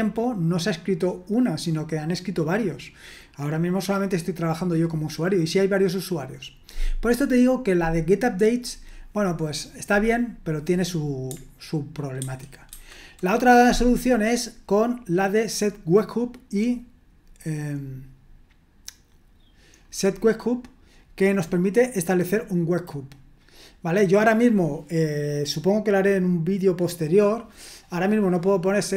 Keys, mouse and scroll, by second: 12.2 super+1, 12.7 super+2.